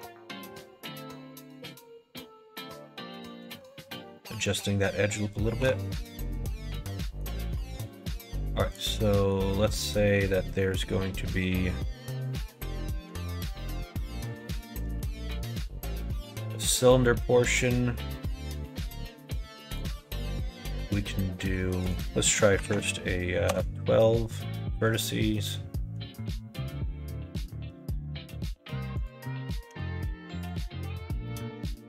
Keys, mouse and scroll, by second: 0.8 g, 3.6 alt+z, 4.1-4.6 scroll up 2, 4.2 middle click, 5.6 3, 6.1 click, 6.9 middle click, 9.1 middle click, 9.5 middle click, 9.8 middle click, 10.8 middle click, 11.8 middle click, 13.4 click, 14.1 click, 14.9 shift+a, 21.8-24.2 drag, 25.3 middle click, 27.3 s, 29.6 g, 30.6 alt+z, 31.2 middle click.